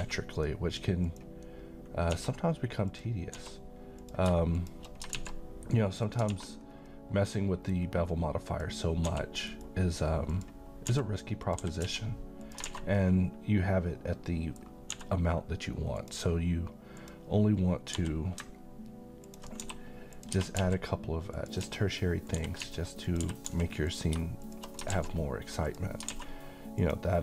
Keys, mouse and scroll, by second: 1.0 click, 2.1 s, 2.9 click, 3.3 s, 4.0 click, 5.1 x, 6.0 click, 6.3 alt+a, 6.5-6.9 scroll down 1, 6.9-7.8 middle click, 7.8-8.5 scroll down 1, 8.5 click, 9.0 s, 9.5 right click, 10.3 click, 10.9 s, 11.4 click, 11.6 g, 11.9 x, 12.4 click, 12.6 a, 13.0-14.8 middle drag, 14.9 d, 15.9 click, 17.9 g, 19.2 ctrl+click, 19.6 s, 20.1 click, 20.4 g, 20.6 x, 21.4 click, 21.6 s, 22.3 click, 22.6 z, 23.1 click, 23.2 g, 23.5 x, 23.9 click, 24.9 x, 25.6 click, 26.1 alt+a, 26.8 click.